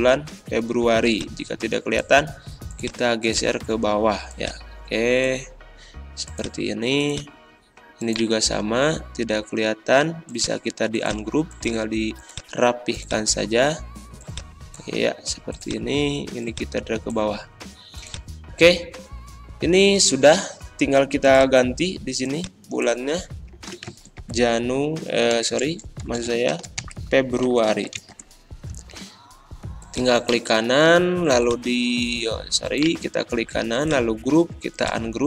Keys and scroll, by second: 23.5-25.3 typing, 26.5-28.5 typing.